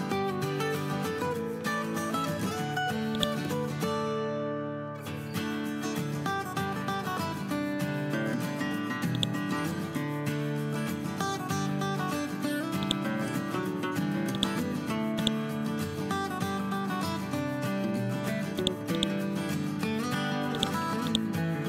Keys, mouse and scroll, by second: 0.6 scroll down 1, 1.6 scroll up 1, 3.1-7.1 drag, 15.9 scroll down 1, 16.8 ctrl+z, 17.2 scroll up 1, 18.5 click, 21.0 right click.